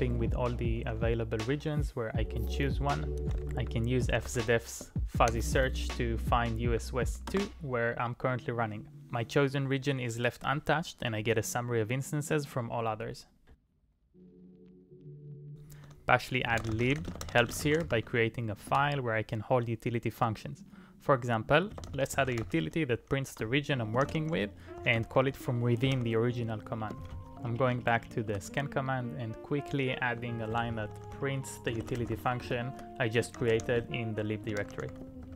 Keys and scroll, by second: 0.0-0.6 typing, 3.0-4.9 typing, 5.3 Up, 7.3 Return, 16.2-19.2 typing, 21.2-22.9 typing, 23.4 Return, 24.1-26.5 typing, 24.9 Return, 27.2 Page_Up, 28.3 Return, 30.2-35.3 typing.